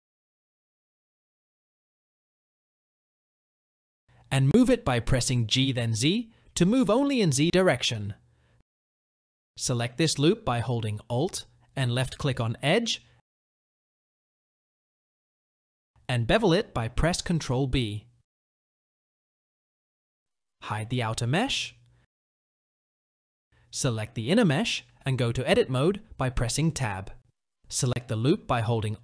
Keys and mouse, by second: 0.6 s, 3.1 g, 12.0 alt+click, 15.2-16.4 drag, 17.0 ctrl+b, 20.0 Tab, 21.2 click, 22.9 click, 24.1 click, 24.7 Tab.